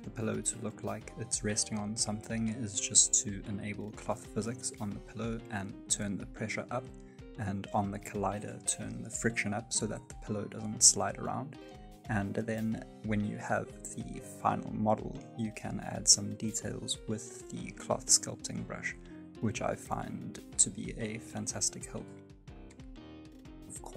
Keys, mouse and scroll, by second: 0.8 space, 1.7 click, 2.6 space, 3.5 space, 4.0 click, 4.3 space, 5.4-5.9 scroll up 2, 5.8 space, 5.9 shift+middle click, 6.7 click, 7.1 click, 7.6 click, 9.0 f, 9.3 click, 11.0 ctrl+z, 11.4 f, 11.9 click, 13.0 click, 14.2 click, 15.1 ctrl+z, 15.4 click, 16.1 click, 17.0 click, 17.5 click, 17.8 click, 18.1 scroll down 3, 18.2 middle click, 18.6 scroll up 1, 18.8 click, 19.3 click, 19.5-20.0 scroll up 3, 20.0 click, 20.9 click, 21.3-21.9 scroll down 7, 21.9 click, 22.9 scroll up 1, 23.5 click.